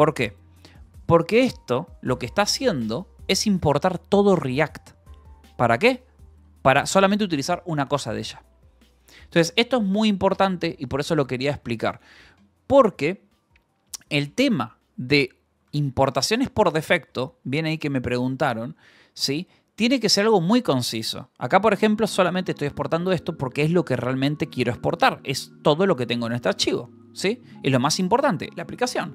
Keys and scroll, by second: 0.0-1.4 typing, 2.2 Escape, 5.5-6.9 typing, 7.2 Escape, 9.1 k, 10.2 Escape, 14.3-17.2 typing, 19.6-23.7 typing, 23.4 Escape, 24.7 v, 25.3 e, 25.8 Escape, 26.7 :.